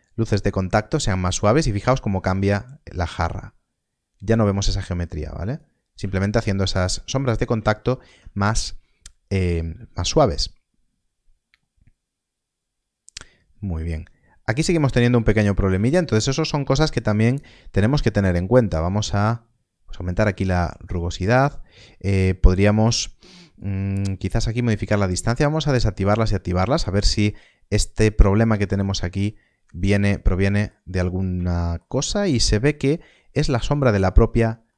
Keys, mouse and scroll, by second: 6.3 shift+middle click, 7.0 scroll up 1, 7.7 shift+middle click, 15.3 scroll down 1, 15.9 shift+middle click, 18.7 shift+middle click, 23.5 click, 27.0 scroll up 1, 29.2 middle click, 31.5 shift+middle click, 32.0 scroll up 1, 34.6 scroll up 1.